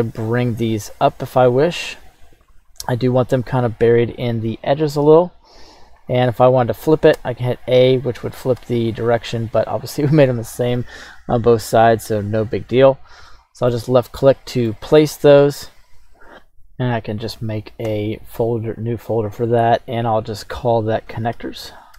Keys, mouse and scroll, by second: 2.5-5.4 drag, 7.1 a, 8.8 a, 12.4-13.3 drag, 13.3-13.8 middle drag, 14.3-14.7 middle drag, 16.9-17.9 right drag, 17.9 m.